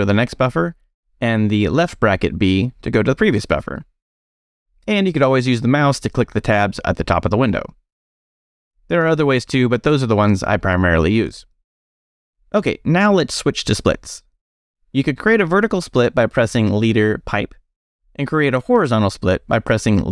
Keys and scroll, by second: 0.1 ], 0.3 b, 1.8 [, 2.1 b, 16.5 space, 16.9 shift+\.